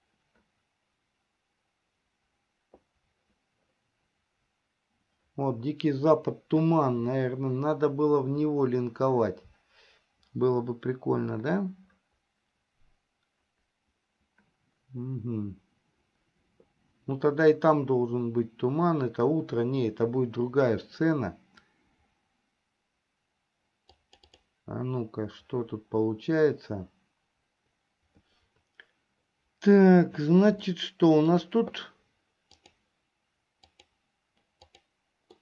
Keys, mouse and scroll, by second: 28.0 Delete, 30.8 shift+middle click, 32.7 click, 33.8 click, 34.8 click.